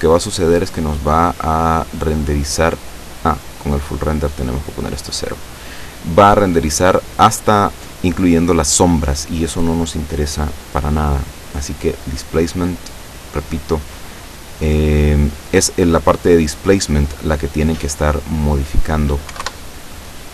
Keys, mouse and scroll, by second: 3.4-4.0 drag, 4.3-4.9 drag, 5.5 click, 10.7 click, 12.0 click, 12.9-13.5 scroll down 1, 13.9 click, 17.1-17.8 scroll down 2, 18.3 click, 19.3 1, 19.4 Return.